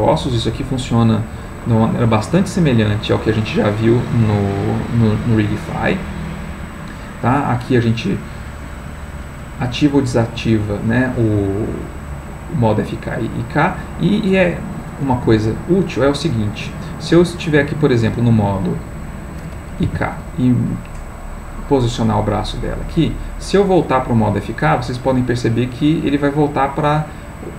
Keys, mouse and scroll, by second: 1.4-2.4 middle drag, 6.3 middle click, 15.1 g, 18.8 click, 19.8 r, 21.6 click, 23.4-27.5 drag.